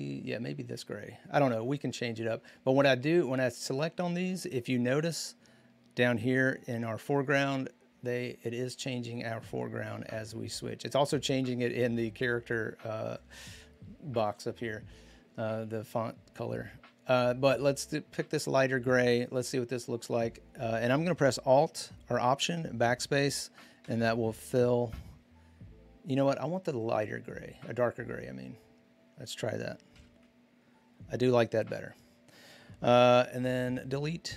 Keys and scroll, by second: 23.6 alt+BackSpace, 30.0 alt+BackSpace, 33.2 ctrl+d.